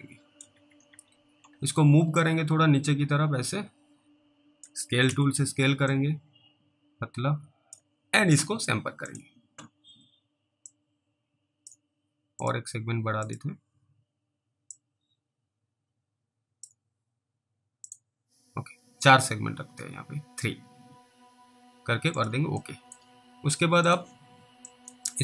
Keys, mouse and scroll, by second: 0.6 alt+w, 0.9 alt+w, 1.5-2.1 scroll up 1, 2.5 click, 5.1 r, 6.2 click, 11.0 click, 12.5 click, 15.0 click, 17.9 click, 22.1 click, 22.9 middle click, 23.9 click, 25.0 click.